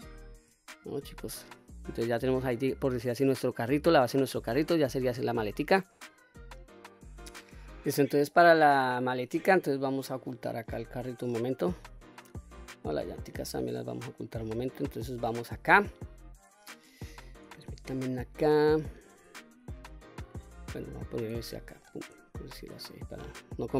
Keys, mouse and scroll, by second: 0.3 ctrl+s, 1.1-2.4 middle drag, 2.8-3.3 middle drag, 3.7-4.1 middle drag, 5.3-6.3 middle drag, 7.0-7.4 middle drag, 7.8-10.7 scroll down 1, 10.7 click, 12.9 click, 13.4 click, 14.1-16.5 scroll up 1, 17.1 shift+s, 21.2 shift+right click, 21.9-22.5 middle drag, 22.6-23.1 middle drag.